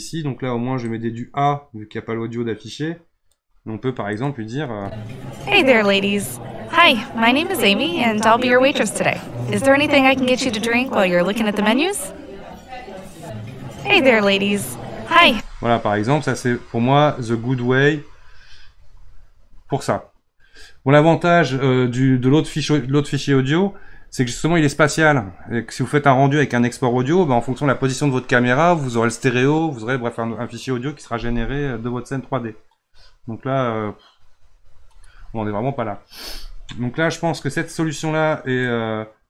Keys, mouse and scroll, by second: 0.8-3.9 drag, 4.2-4.7 drag, 4.7 space, 15.2 space, 38.6-39.2 drag.